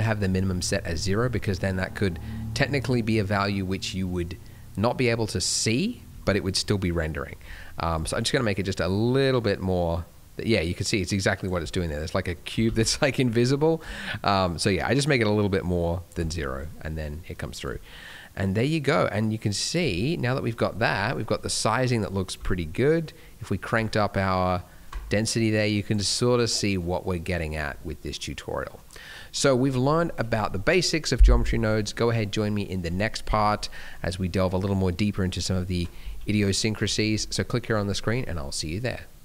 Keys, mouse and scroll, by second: 7.9 click, 12.6 ctrl+z, 13.7 click, 16.3 middle click, 16.6 scroll down 2, 17.6 click, 18.6 shift+click, 19.9 middle click, 20.6 scroll down 2, 20.9 middle click, 21.3 middle click, 21.5-22.2 scroll up 2, 22.2 click, 26.2 middle click, 26.7 scroll up 2, 27.0 middle click, 27.4 scroll down 2, 27.6 middle click, 28.9 middle click, 29.3-29.8 scroll down 2, 29.8 middle click, 33.2-33.5 scroll down 1, 33.5 middle click, 34.7-36.2 scroll up 2.